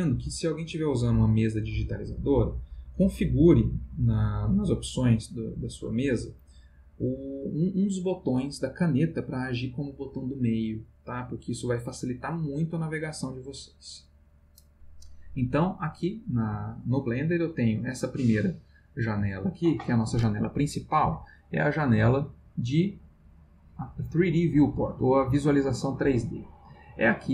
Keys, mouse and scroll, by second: 15.9 click, 17.3 click, 21.6 click, 22.1 click, 27.0 click.